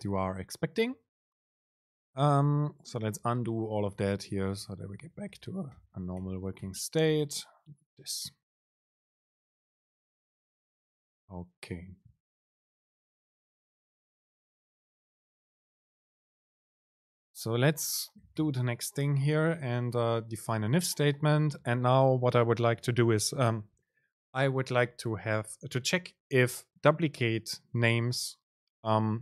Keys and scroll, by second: 3.6 super+z, 4.3 super+z, 4.8 super+z, 5.9 super+z, 6.9 super+z, 9.0 ctrl+shift+super+F9, 17.2 Return.